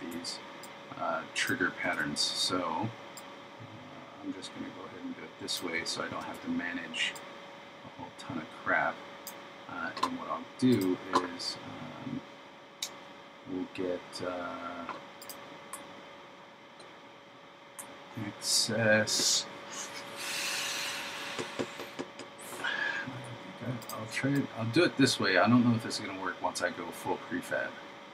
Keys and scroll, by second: 1.9 super+v, 6.2 super+v.